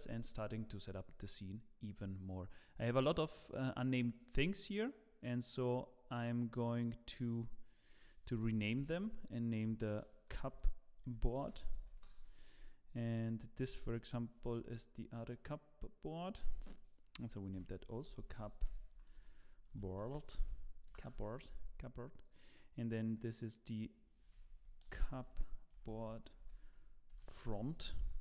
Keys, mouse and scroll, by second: 0.5 middle click, 2.2 click, 2.9 middle click, 3.7 click, 4.1 click, 5.2 click, 8.4 F2, 8.4 click, 13.1 click, 14.6 middle click, 17.5 F2, 22.2 click, 23.1 middle click, 24.3 F2.